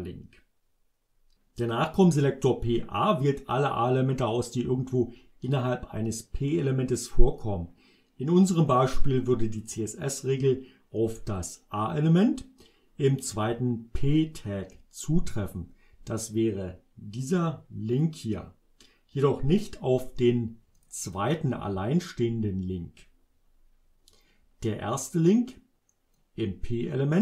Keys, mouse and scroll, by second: 16.4-18.2 drag, 20.8 click, 25.0 click, 26.2-27.2 drag.